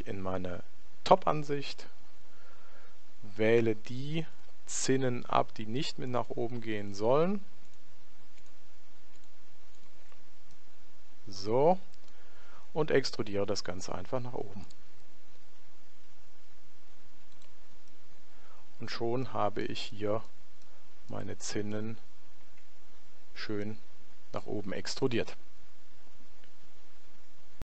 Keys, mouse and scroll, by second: 1.1 KP_7, 3.5-6.0 right drag, 6.2-11.5 right drag, 10.6-12.3 middle drag, 13.2 e, 17.9-23.1 middle drag, 23.1 Tab, 23.7-25.3 middle drag.